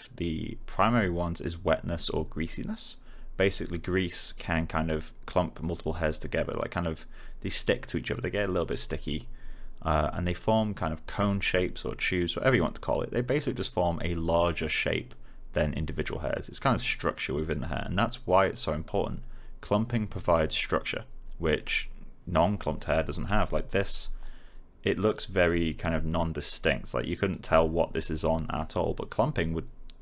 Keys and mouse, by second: 23.4 alt+click, 23.6 alt+middle click, 24.1-27.3 alt+drag.